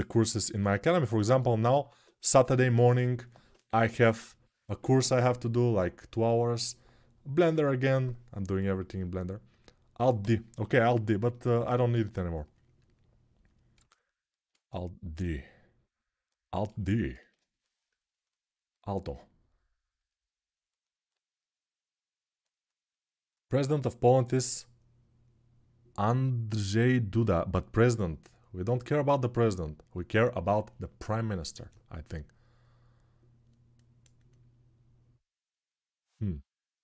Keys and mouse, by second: 0.3-11.2 alt+drag, 11.2-36.8 ctrl+alt+right drag.